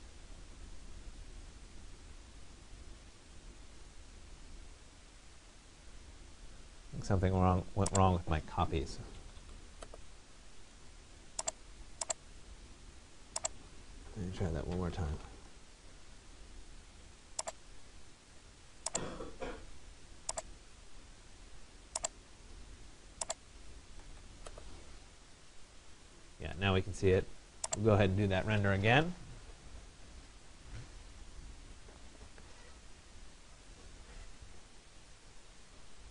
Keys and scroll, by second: 8.8 Escape, 15.0 Return, 23.5 Escape.